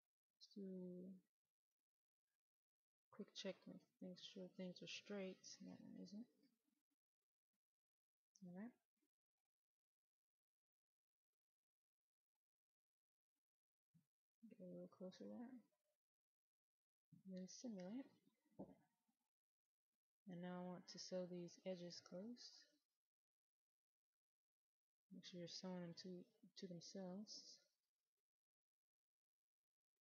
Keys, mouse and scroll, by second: 2.6 click, 5.5 right click, 7.0-18.7 drag, 18.7-21.1 right drag, 21.6 click.